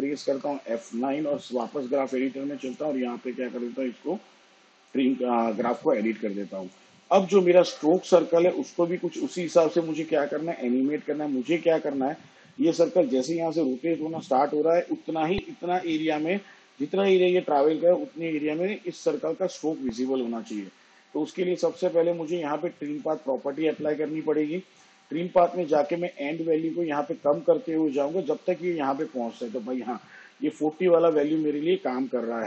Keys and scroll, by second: 2.1 F9.